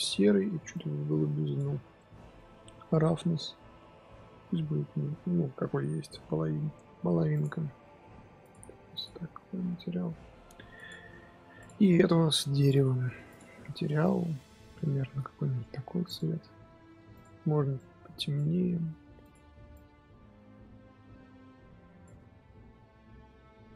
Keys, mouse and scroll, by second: 1.9-7.3 middle drag, 7.3 click, 9.0 click, 9.3-10.8 middle drag, 10.8 click, 11.6 click, 11.7 middle click, 12.6-13.9 drag, 17.7 click, 19.6 click, 22.3 scroll down 3, 22.4 KP_0, 23.1-23.7 scroll down 2.